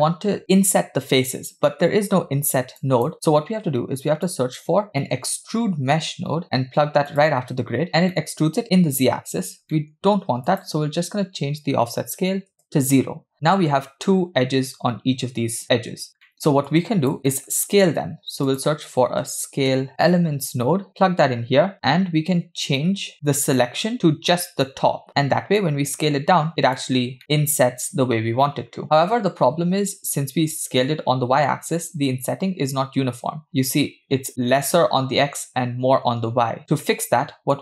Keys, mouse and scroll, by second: 2.8 click, 3.4 shift+a, 6.1 BackSpace, 8.2-8.5 middle drag, 9.4 scroll up 2, 9.8 middle click, 10.5-12.7 drag, 16.3 middle click, 16.7 click, 17.3 middle click, 17.8 shift+a, 24.7-25.1 drag, 25.6-26.8 drag, 27.2 middle click, 28.8 KP_7, 29.6-30.6 scroll down 1, 31.7-32.4 scroll up 2, 32.5-34.2 scroll down 1, 36.8 middle click.